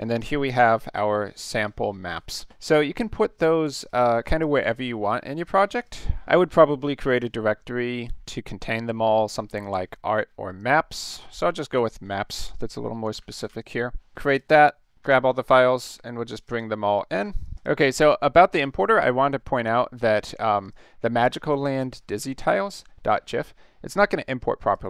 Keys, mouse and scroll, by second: 2.3 click, 3.9 click, 5.8 click, 10.5 right click, 10.9 click, 12.8-14.0 typing, 14.3 click, 15.0 ctrl+a, 16.4 click, 16.5 click, 16.9 click, 17.1 ctrl+a, 17.4 click, 20.6 click, 24.6 click.